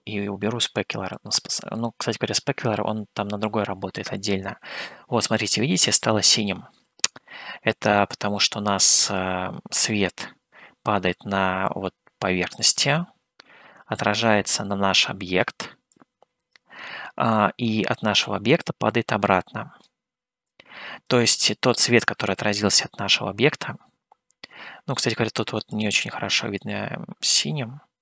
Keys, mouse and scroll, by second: 1.4-2.9 drag, 6.0 scroll up 1, 9.4 click, 12.2-15.6 drag, 16.2 click, 18.9-20.2 drag, 20.7 click, 25.7 click.